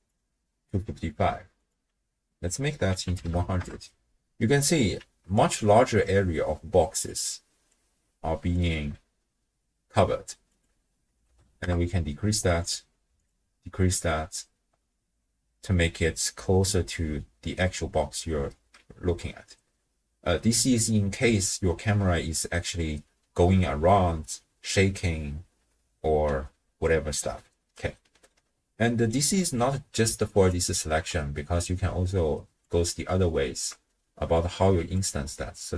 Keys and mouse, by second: 1.6-3.7 drag, 3.3 0, 5.0-7.7 d, 5.4 click, 6.0-7.1 drag, 7.7 click, 8.5 d, 8.7 d, 8.8 d, 10.5-11.7 drag, 12.6 click, 28.0 click, 28.0 middle click, 28.8 click, 28.8 middle click, 30.4 ctrl+alt+click, 31.5-32.8 drag, 34.6 q, 35.4-35.7 drag.